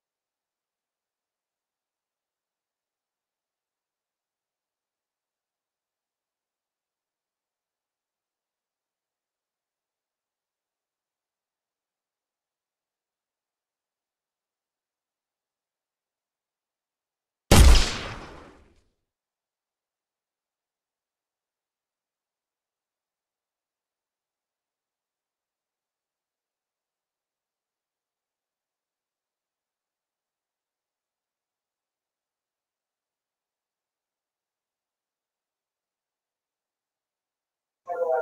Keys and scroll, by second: 9.5 w, 11.8 space, 14.2 space, 16.2 w, 18.8 w, 21.6 space, 21.9 w, 24.1 Escape.